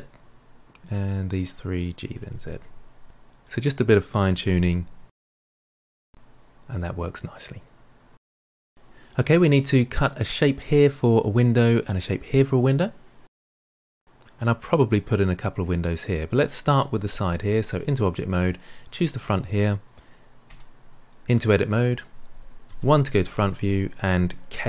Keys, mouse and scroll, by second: 0.9 click, 2.0 g, 3.3 click, 4.5 g, 5.4-6.9 middle drag, 7.8 middle click, 13.2-14.0 middle drag, 15.6-17.6 middle drag, 17.6 Tab, 18.5 click, 20.4 Tab, 22.6 KP_1.